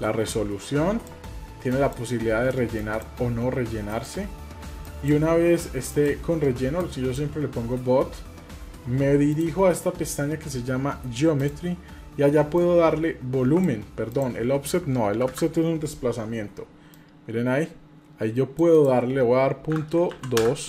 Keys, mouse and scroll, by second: 1.7-3.0 drag, 3.9-5.1 drag, 5.9-7.1 drag, 9.3 click, 11.4 click, 12.6-13.7 drag, 14.1-15.4 drag, 16.9-18.7 drag, 18.8-20.4 drag.